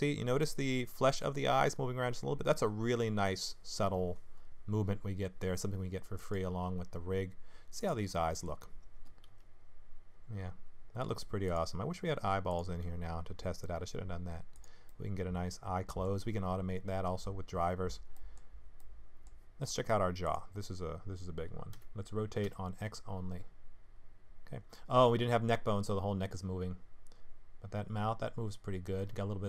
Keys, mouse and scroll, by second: 6.8-7.8 scroll up 1, 7.8 click, 8.1 middle click, 9.3 g, 12.5 click, 12.8 g, 14.9 middle click, 16.3-16.9 scroll up 1, 16.9-17.9 scroll down 1, 18.1 middle click, 18.8 middle click, 20.2 click, 21.7 r.